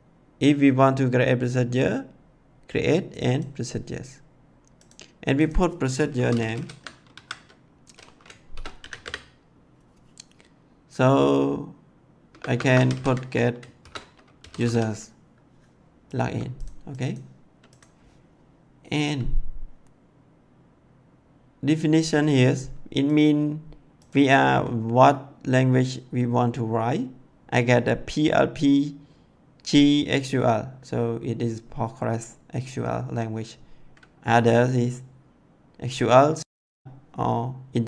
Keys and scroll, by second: 6.1 p, 6.2 r, 6.3 o, 7.1 c, 8.5 shift+-, 8.7 n, 8.8 a, 8.9 m, 12.2-14.6 typing.